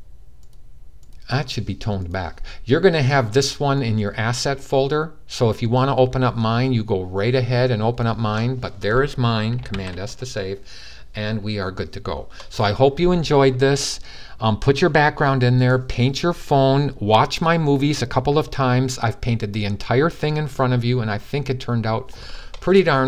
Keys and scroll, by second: 9.4 super+s.